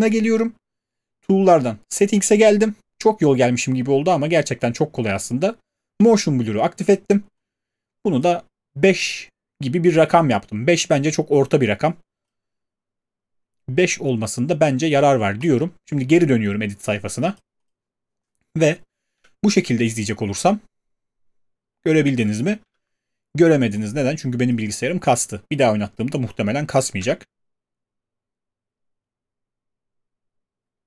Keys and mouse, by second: 2.0 click, 6.0 click, 8.2 click, 11.0-16.0 drag, 17.7 click, 19.2 space, 22.6 space, 24.5 click, 27.0 space.